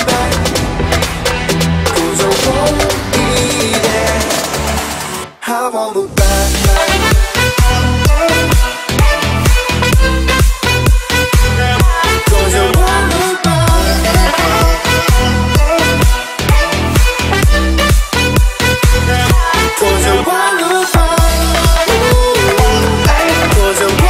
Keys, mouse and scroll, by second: 0.3 space, 0.6-0.9 scroll up 1, 1.8 shift+e, 2.3 click, 2.7 space, 2.8 scroll down 1, 3.5 shift+middle click, 3.8 scroll up 1, 4.3 e, 4.9-6.2 drag, 6.2-6.6 scroll down 1, 6.7 scroll up 1, 6.8 shift+middle click, 7.5 click, 7.8 space, 7.9 scroll down 1, 8.9 shift+middle click, 9.5 scroll up 1, 9.8 shift+middle click, 10.2-11.1 scroll up 1, 11.1 click, 11.9 p, 12.0 click, 13.5 space, 14.5 p, 15.2 space, 15.4 click, 16.2 p, 16.2 click, 16.6 space, 17.4 ctrl+z, 17.8-18.1 scroll up 1, 18.1 middle click, 18.9 p, 19.1 click, 20.0 space, 20.2 scroll down 1, 21.0 middle click, 21.4-22.5 scroll up 1, 22.5 click, 22.9-23.7 scroll up 1, 23.7 l.